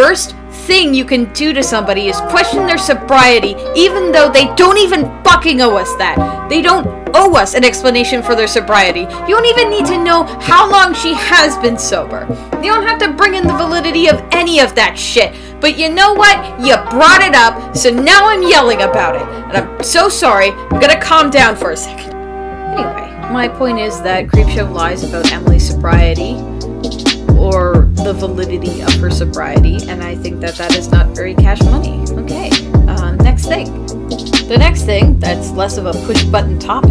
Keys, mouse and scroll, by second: 1.3 space, 5.2 space, 11.7 ctrl+z, 12.1 ctrl+s, 12.3 ctrl+z, 12.4 Delete, 13.3 ctrl+z, 18.0 space, 22.2 e, 22.5 e.